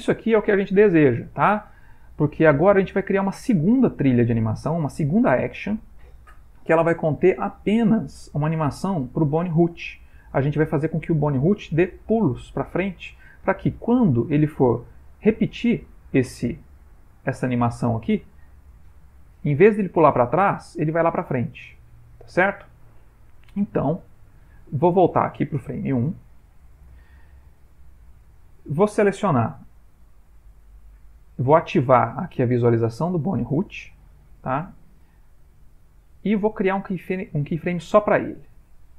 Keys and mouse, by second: 1.4 Escape, 14.4 middle click, 14.9 middle click, 15.4 ctrl+middle click, 15.9 ctrl+middle click, 17.3 click, 23.1 click, 26.2 Left, 30.5 middle click, 32.9 shift+middle click, 33.5 shift+middle click, 34.1 middle click, 34.7 ctrl+middle click, 36.2 click, 38.4 click.